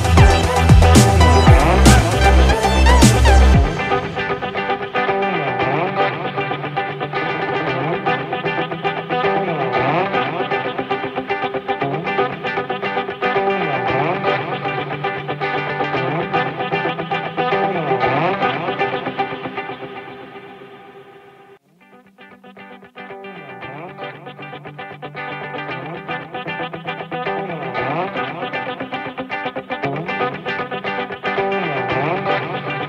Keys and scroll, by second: 11.8 ctrl+=.